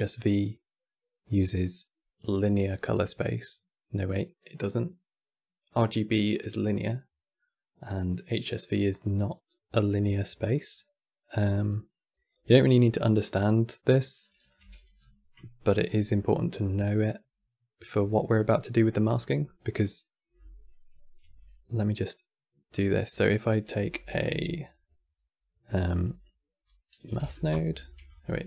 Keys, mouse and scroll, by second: 14.2 click, 14.3 x, 14.6 scroll down 5, 15.1 middle click, 15.6-15.9 scroll down 4, 15.9-18.9 middle drag, 20.4-20.9 scroll down 1, 20.9 q, 23.5 c, 24.0 v, 27.8 click, 28.0 x.